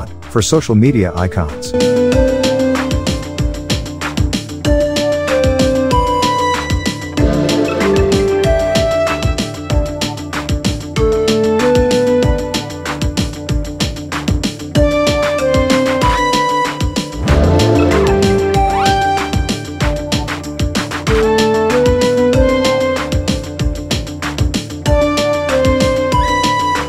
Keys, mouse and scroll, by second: 0.6 click, 2.2 Right, 4.6 click, 8.2 click, 11.6-14.0 drag, 14.5-15.3 scroll up 1, 16.2 click, 17.0 Delete, 17.7 click, 17.9-18.5 scroll up 1, 18.5-21.4 drag, 23.0-23.5 alt+scroll down 1, 24.0 alt+scroll up 1, 24.3 space, 24.4-25.2 click, 25.8 click, 26.3-26.8 alt+click.